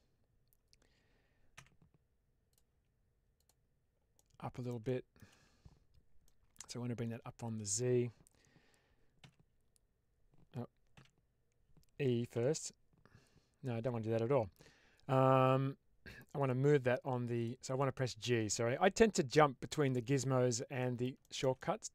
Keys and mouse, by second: 1.4 w, 2.4 click, 3.3 click, 4.1 middle click, 4.8 shift+middle click, 6.1-7.6 middle drag, 9.1 z, 10.8 z, 12.2 e, 16.3 click, 17.3 click, 17.7 middle click, 20.7 middle click, 21.1 shift+middle click, 21.5 middle click.